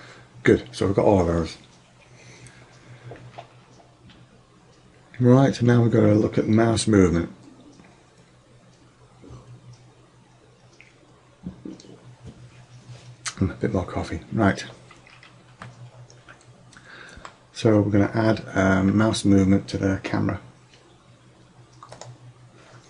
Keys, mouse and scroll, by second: 15.7-17.8 middle drag, 22.0 click.